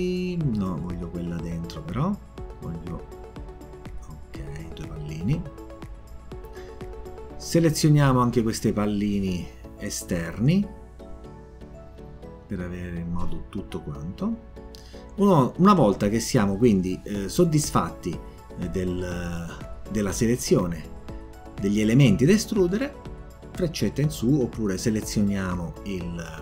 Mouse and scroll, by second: 1.0 click, 2.9 click, 4.0 click, 6.4 click, 7.1 click, 8.1-8.7 drag, 9.6 click, 10.8 click, 11.8 click, 12.5 click, 13.7 click, 18.1 click, 23.6 click.